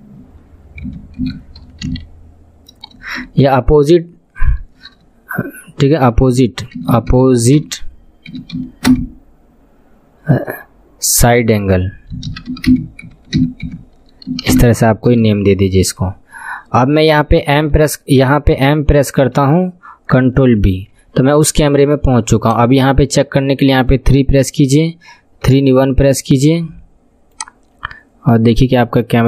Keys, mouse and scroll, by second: 3.2 BackSpace, 6.9 p, 17.6 m, 19.2 m, 20.8 ctrl+b, 22.4 click, 23.1-23.8 scroll down 2, 23.8 KP_3, 25.5 KP_1, 26.0-26.9 scroll down 5, 26.9-28.0 scroll down 1, 27.3 click.